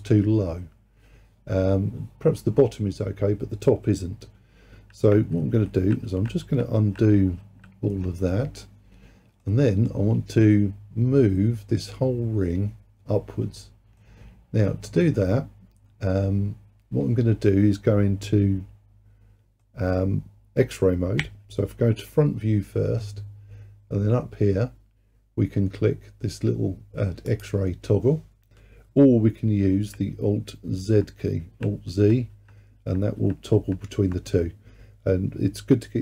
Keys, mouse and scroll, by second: 5.4 ctrl+z, 5.7 ctrl+z, 6.1 ctrl+z, 6.5 ctrl+z, 6.8 ctrl+z, 7.5 ctrl+z, 9.5-12.5 middle drag, 14.1-17.1 middle drag, 19.7-21.3 middle drag, 21.3 KP_1, 27.3-30.5 drag, 30.8 alt+z, 31.4 alt+z, 32.0 alt+z, 32.4 alt+z, 32.9 alt+z, 33.2 alt+z, 33.6 alt+z.